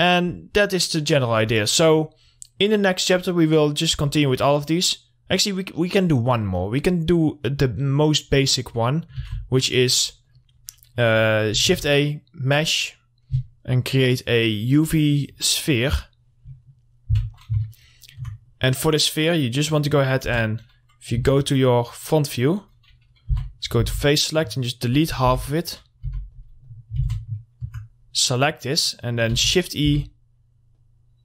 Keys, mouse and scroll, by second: 0.4 scroll down 1, 4.2 scroll up 1, 4.6 click, 7.1 middle click, 9.3 shift+e, 10.0 middle click, 10.2 scroll down 1, 10.5 click, 11.8 shift+a, 15.8 click, 16.7 middle click, 17.1 scroll up 1, 17.9 alt+middle click, 19.2 click, 19.8 middle click, 20.4 Tab, 22.2 click, 22.5 middle click, 23.5 3, 23.7 middle click, 24.0 alt+x, 24.3-26.3 drag, 26.3 2, 26.4 click, 27.2 alt+x, 27.6 alt+middle click, 28.2-28.6 scroll up 1, 28.6 middle click, 29.5 e, 29.7 right click, 30.1 r, 30.9-31.2 drag.